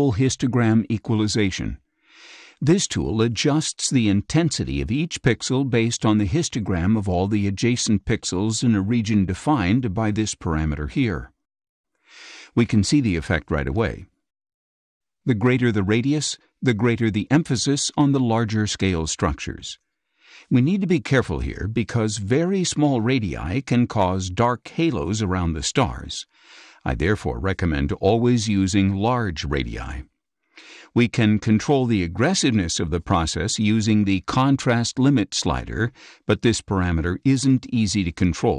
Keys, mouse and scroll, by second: 3.0 click, 9.1-10.9 drag, 12.8 click, 16.8-22.0 drag, 28.2-30.5 drag, 37.5 click.